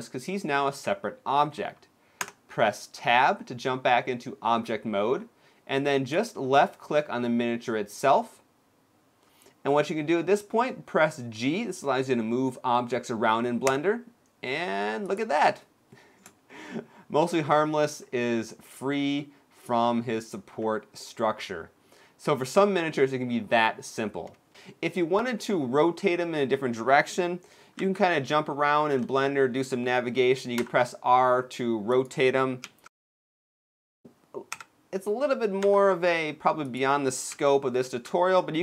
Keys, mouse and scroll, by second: 2.1 Tab, 3.9-5.0 scroll down 2, 5.8 click, 7.2-8.9 scroll down 2, 8.9 scroll down 1, 13.4 g, 16.2 shift+middle click, 17.1-17.6 scroll up 2, 17.6-18.0 scroll down 3, 18.0 middle click, 19.7-20.3 scroll up 1, 20.3 scroll up 3, 20.5 scroll down 1, 20.7 middle click, 22.2-23.3 scroll down 2, 27.5 KP_1, 28.7 KP_5, 30.3 r, 32.3 KP_3, 34.2 KP_7, 35.3 r, 37.0 KP_1, 37.5 KP_3.